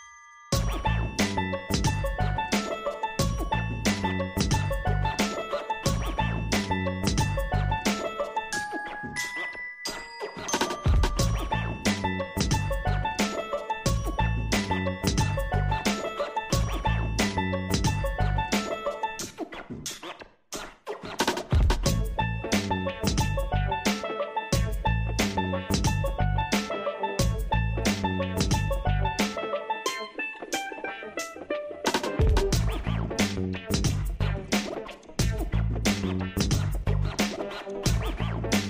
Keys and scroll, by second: 1.6 ctrl+t.